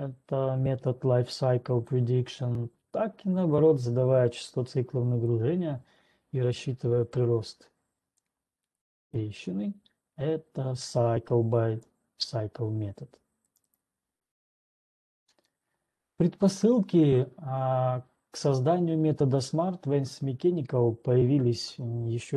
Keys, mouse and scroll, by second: 2.1 click, 5.6 click, 9.1 click, 12.1 click, 14.1 right click, 16.1 scroll down 2.